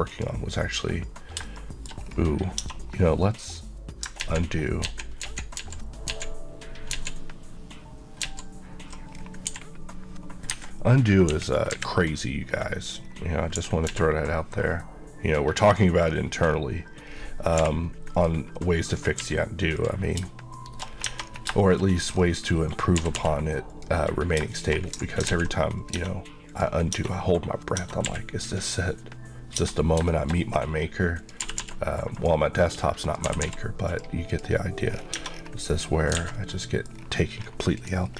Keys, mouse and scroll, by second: 0.1 click, 1.6 shift+middle click, 2.1 scroll down 1, 2.6-3.0 scroll down 2, 2.7 Tab, 4.2 ctrl+scroll down 1, 4.3 ctrl+z, 4.9 ctrl+z, 5.6 ctrl+z, 9.2 scroll down 1, 9.5 g, 10.5 Escape, 11.3 KP_1, 11.8 KP_3, 12.6-13.6 scroll down 1, 13.6 g, 13.9 z, 15.7 click, 16.1 scroll up 1, 17.2-17.6 scroll down 1, 17.6 h, 18.2 click, 18.6 middle click, 18.9 scroll up 1, 19.2 q, 19.8 click, 20.6 shift+middle click, 20.9-21.3 shift+scroll up 3, 21.1 Tab, 21.7 shift+middle click, 21.9 scroll up 1, 22.7 click, 23.0 typing, 23.8 click, 25.0 ctrl+scroll down 2, 25.3 x, 25.8 click, 26.0 Tab, 26.5 click, 26.9 Tab, 27.1 scroll down 1, 27.8 Tab, 28.1 q, 28.6 click, 29.6 Tab, 30.1 shift+middle click, 30.4 scroll up 1, 31.2 click, 31.4 typing, 32.2 click, 33.2 click, 33.3 typing, 33.9 click, 35.0 scroll, 35.1-35.6 scroll down 2, 35.2 Tab, 35.7 middle click, 36.2 alt+a, 36.5 middle click, 37.0 scroll down 1, 37.8 click.